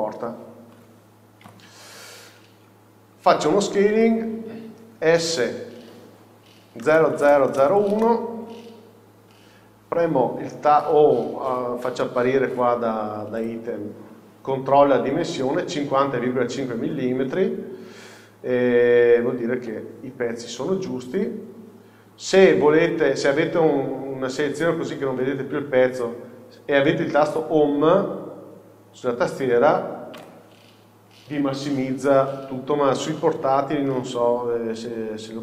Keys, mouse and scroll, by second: 0.0-1.5 drag, 1.5 KP_7, 2.6-4.1 scroll down 1, 4.1-9.9 shift+middle drag, 5.3 s, 9.2 scroll up 1, 9.9-10.5 scroll up 1, 10.5-16.8 scroll down 2, 16.8-19.7 scroll down 1, 19.7 Home, 21.1-21.7 scroll down 2, 30.3 Home, 35.1 n.